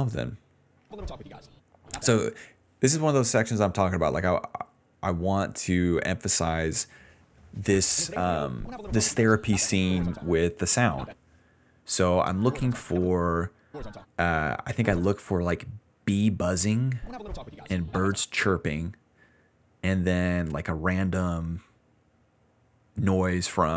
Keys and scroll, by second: 0.8-3.4 typing, 5.9 w, 7.2-8.9 typing, 10.3 space, 10.8 space, 11.0 space, 12.1-15.0 typing, 16.5 s, 16.9 space, 18.2 space.